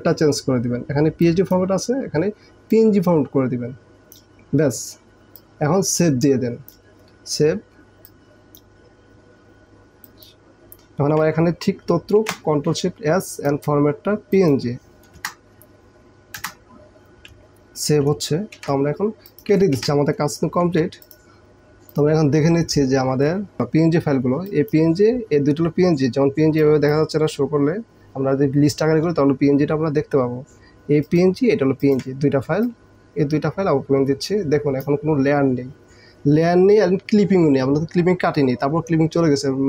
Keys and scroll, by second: 12.2 ctrl+shift+s, 15.5 Return, 18.6 ctrl+w, 19.8 ctrl+w.